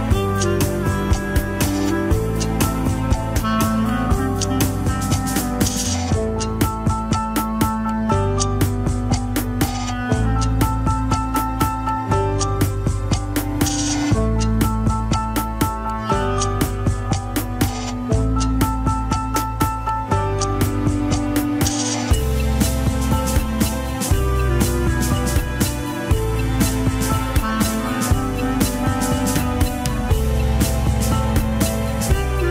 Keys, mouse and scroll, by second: 0.5-3.1 middle drag, 3.1-4.1 drag, 4.1 f, 4.7-8.7 drag, 8.7 middle click, 9.2-19.6 drag, 22.5-26.6 drag, 26.6 middle click, 27.2 click, 27.9-29.4 middle drag, 29.4-31.9 drag, 32.4 click.